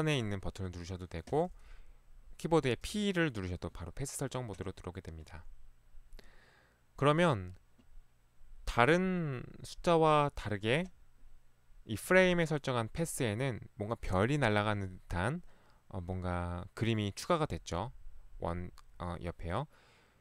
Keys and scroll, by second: 0.7 Escape, 2.9 p.